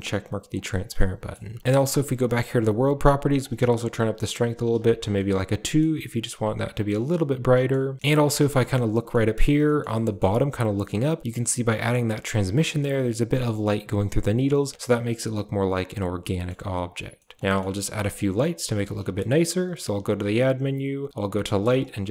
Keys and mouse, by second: 0.4 click, 0.9 middle drag, 1.6 shift+a, 2.0 click, 3.2-4.6 drag, 5.1-5.6 middle drag, 6.1-6.8 middle drag, 7.4 middle click, 7.9 middle click, 8.3 shift+middle click, 8.7 middle click, 9.6 shift+middle drag, 10.0 middle click, 16.1 middle click, 17.1 middle drag, 17.8 shift+a.